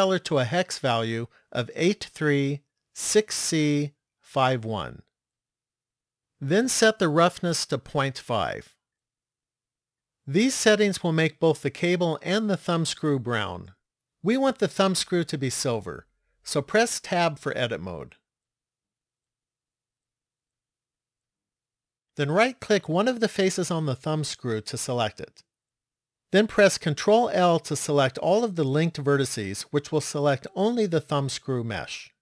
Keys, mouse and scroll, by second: 7.4 click, 17.1 Tab, 19.5-22.2 scroll up 7, 23.6 right click, 27.2 ctrl+l, 29.2-29.8 scroll down 5, 30.3-31.0 scroll down 2.